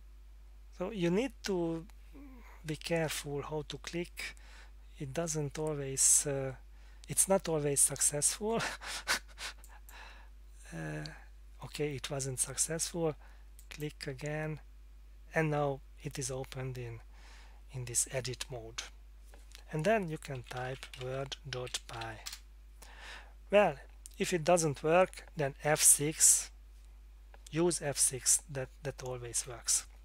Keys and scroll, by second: 20.1-22.5 typing, 26.0 F6, 29.3 Escape.